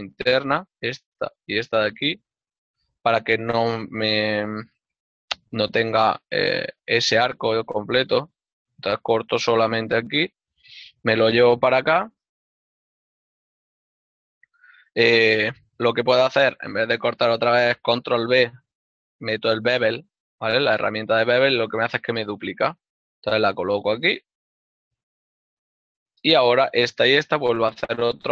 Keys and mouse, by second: 1.4 click, 1.6 right click, 1.7 shift+right click, 2.8 x, 3.0 click, 5.7 z, 7.3 click, 8.8 ctrl+r, 10.6 click, 11.8 click, 12.4 shift+middle click, 16.0 g, 18.1 ctrl+b, 25.6 click, 26.9 right click.